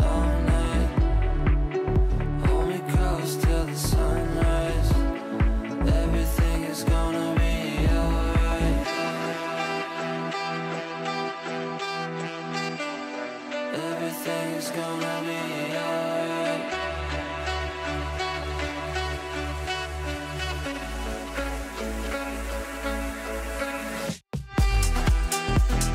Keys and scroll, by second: 22.9 Delete.